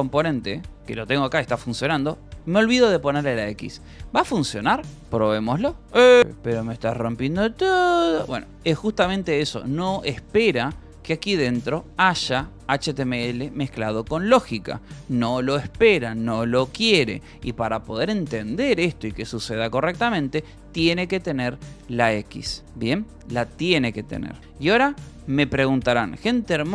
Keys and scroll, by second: 0.3 j, 0.7 k, 2.1 :, 2.6 l, 3.6 a, 3.8 BackSpace, 4.5 Escape, 5.0 ctrl+s, 5.1-8.6 typing, 5.7 Return, 10.5 j, 11.5 k, 12.5 j, 13.6 Escape, 13.9 k, 19.6-22.2 typing, 22.8 Escape, 23.6 w, 23.7 Return, 24.0 y.